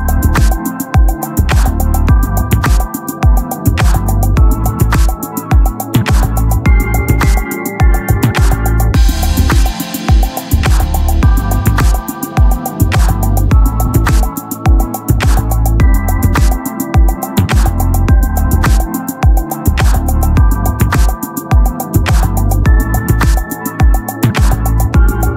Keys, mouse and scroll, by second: 0.9-2.3 drag, 2.8 r, 4.3 click, 4.4 z, 4.7 Tab, 8.4-10.0 drag, 10.2-12.6 drag, 11.0 x, 12.6 t, 13.4-14.6 drag, 14.1 KP_3, 14.6 z, 15.1 z, 15.6 z, 16.0-19.0 drag, 19.0 z, 19.5 click, 19.9 z, 20.7 shift+s, 22.6 z, 23.8 shift+s.